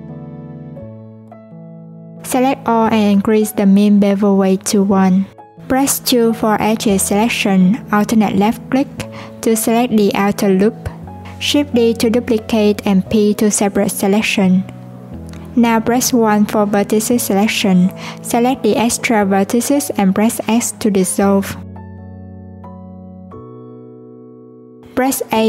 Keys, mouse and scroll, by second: 1.6 click, 2.7 a, 3.7-5.0 drag, 5.0 alt+z, 5.7 2, 7.0 alt+click, 8.2 alt+click, 11.6 shift+d, 13.2 p, 14.2 Tab, 14.7 click, 17.0 i, 18.2 click, 19.5 shift+click, 21.7 x, 25.3 a.